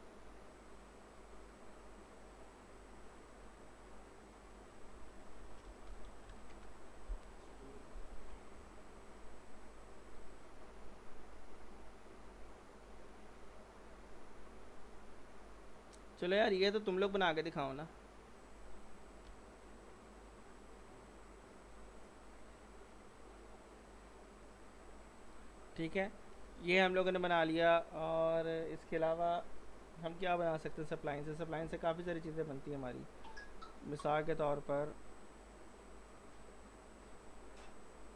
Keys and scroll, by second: 5.5-6.5 typing, 11.4-12.3 typing, 26.9 z.